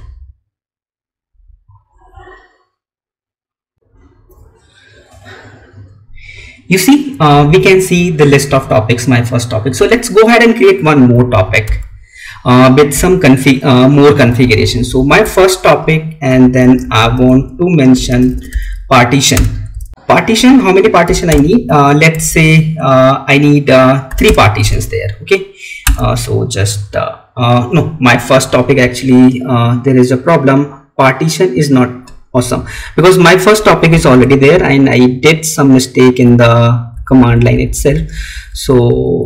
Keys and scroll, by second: 11.2 Up, 12.8 Left, 19.6 space, 19.8 alt+Tab, 21.5 space, 24.5 space, 33.8 Up, 34.4 Left.